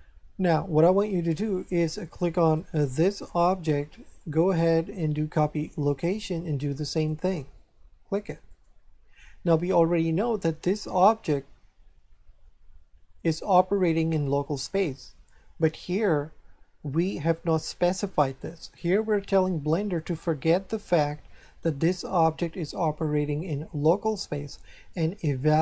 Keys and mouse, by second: 2.4 right click, 4.1 click, 5.4 click, 6.9 click, 8.5 click.